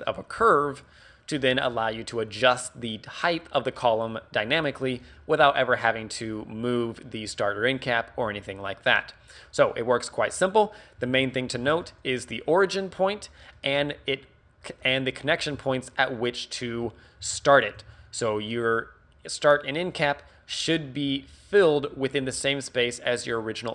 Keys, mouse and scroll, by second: 10.5 scroll up 1, 11.0 Tab, 11.4 shift+middle click, 11.7 z, 11.8 middle click, 13.6 middle click, 15.6 Tab, 17.2 alt+h, 17.8 a, 18.5 right click.